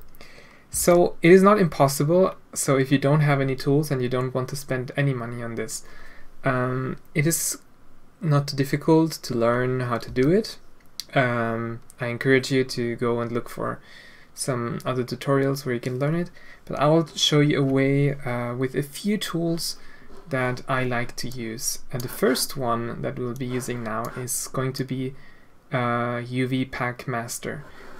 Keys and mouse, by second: 0.8 alt+a, 10.1 a.